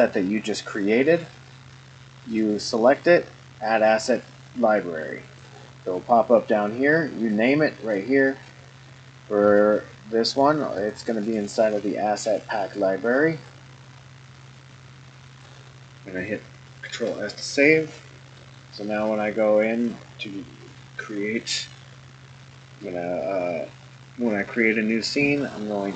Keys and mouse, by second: 16.9 ctrl+s, 18.4-19.9 drag, 23.0-25.9 drag.